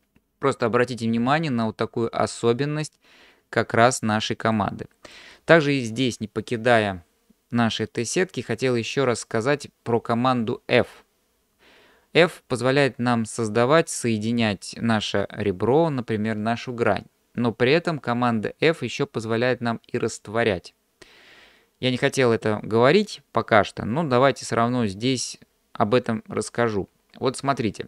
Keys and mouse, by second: 4.7 middle click.